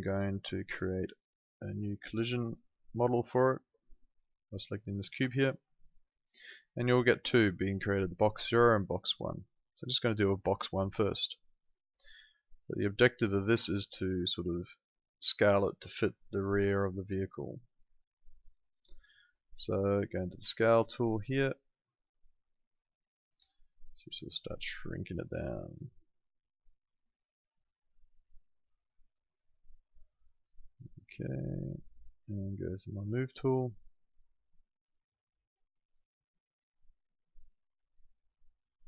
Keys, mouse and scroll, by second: 5.1 Escape, 5.7 click, 12.5 right click, 13.0 middle click, 13.7 click, 20.2 click, 21.4 click, 33.0 click, 38.3 click.